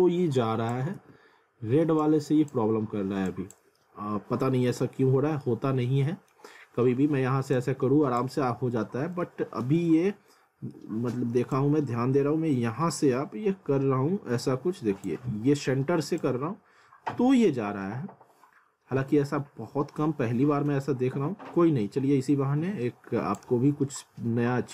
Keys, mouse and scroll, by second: 1.0 ctrl+z, 2.0 click, 3.8 alt+middle click, 4.9 alt+middle click, 5.6 scroll down 1, 5.8 alt+middle click, 6.5 scroll up 1, 7.6 click, 9.5 alt+middle click, 10.1 alt+middle click, 11.5 click, 24.0 alt+middle click.